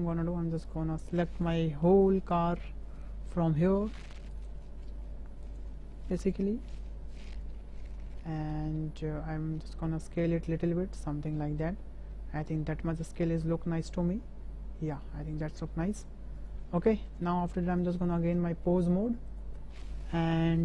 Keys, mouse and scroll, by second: 0.7 click, 4.3-5.7 drag, 6.2-7.4 drag, 9.4 s, 14.2 s, 15.4-16.0 middle drag, 16.3 click, 17.0 shift+drag, 18.8-19.4 drag, 19.8 shift+drag, 20.0 shift+middle click.